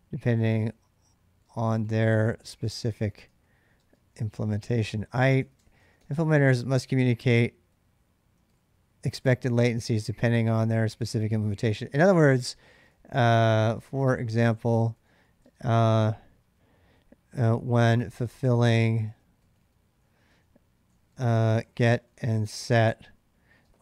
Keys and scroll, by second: 0.0-6.3 typing, 7.5-9.6 typing, 10.0 ctrl+[, 10.0 ctrl+j, 11.1-15.7 typing, 17.0-23.8 typing.